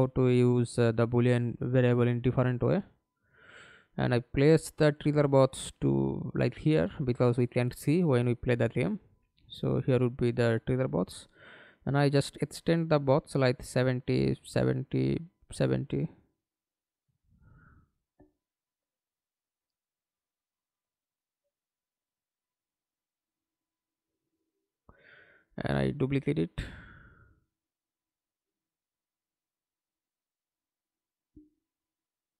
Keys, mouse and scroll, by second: 0.1 alt+click, 2.6 r, 3.0-3.5 scroll down 3, 3.5 alt+click, 4.4 w, 8.8 r, 11.3 KP_7, 11.6 KP_0, 12.0 Return, 14.3 KP_0, 14.3 KP_7, 14.7 Return, 16.7 KP_7, 17.0 KP_0, 17.3 Return, 18.5 middle click, 19.1 w, 22.5 scroll down 1, 22.7 alt+click, 24.1 alt+click.